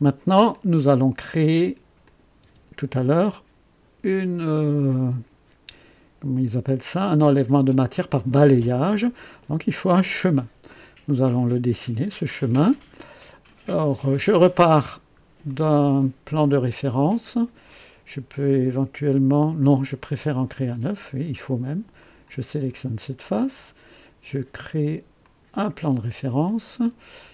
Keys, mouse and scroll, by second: 0.5 click, 2.0 click, 2.4 space, 10.6 click, 12.9 click, 14.3 click, 14.9 scroll up 1, 15.5-16.1 right drag, 21.9 click, 25.2 click, 26.8-27.3 drag.